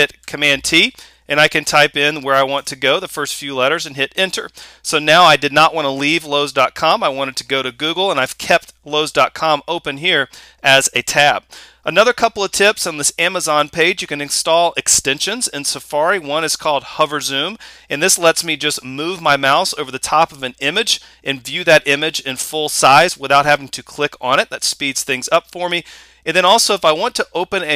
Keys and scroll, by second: 0.2 super+t, 2.6 Return.